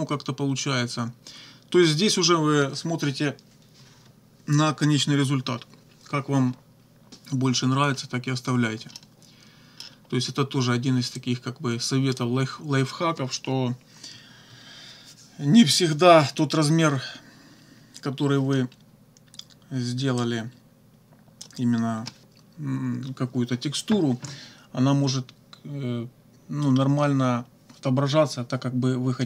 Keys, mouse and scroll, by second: 9.0-10.0 drag, 11.2-12.4 drag, 20.2-21.6 drag.